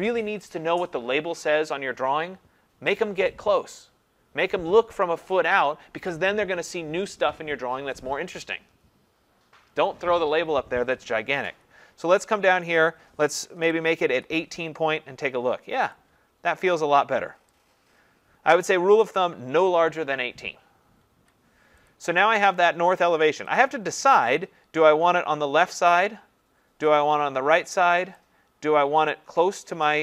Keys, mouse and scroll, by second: 12.8 click, 13.2-14.1 typing, 16.0 click, 19.2 click, 21.1 Escape, 21.9 click, 23.6 click, 25.8 click, 29.9 click.